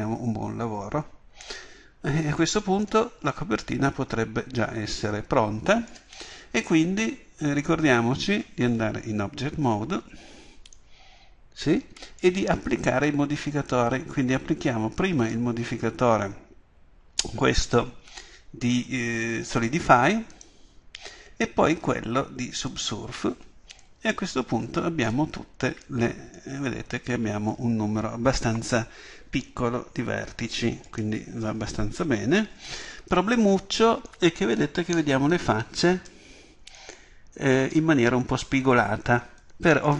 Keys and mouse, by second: 9.6 Tab, 20.3-22.1 drag, 24.9 click, 25.7 Tab, 33.1 Tab.